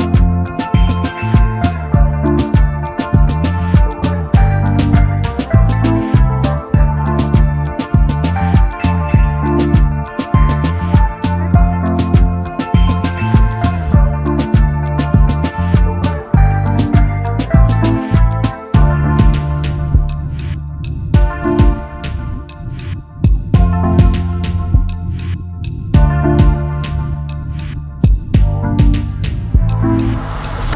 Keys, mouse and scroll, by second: 1.3-1.8 scroll down 1, 2.0 scroll up 1, 2.0-6.8 scroll down 1, 8.0 x, 10.1 alt+scroll down 1, 10.2-10.9 alt+scroll up 1, 12.3 ctrl+z, 13.9 ctrl+z, 15.0 double click, 22.9 x, 26.1 double click, 29.0 double click.